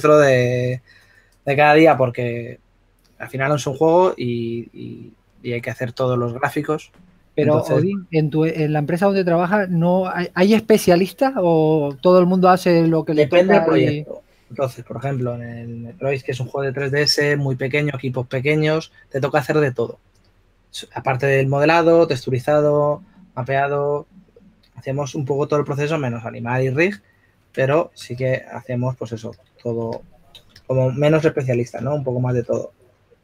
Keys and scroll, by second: 13.1-14.2 typing, 28.4 shift+s, 30.9-32.6 typing.